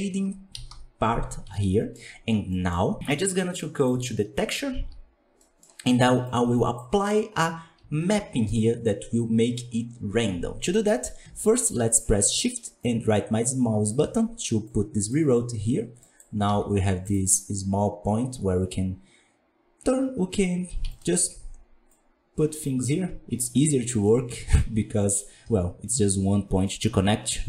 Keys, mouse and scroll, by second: 0.0 scroll down 5, 0.5 KP_1, 0.7 KP_5, 1.5-3.0 shift+middle drag, 3.0-13.8 drag, 13.8 shift+right click, 15.0 click, 21.0 ctrl+right click, 21.8-25.3 drag.